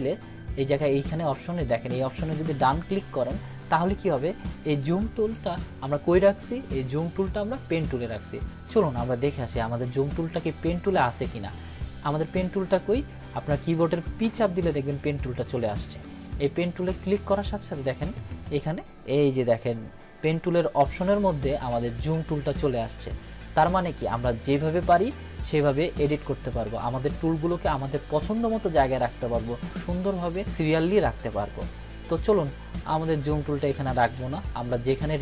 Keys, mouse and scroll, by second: 10.0 click, 14.2 p, 17.7-18.7 drag.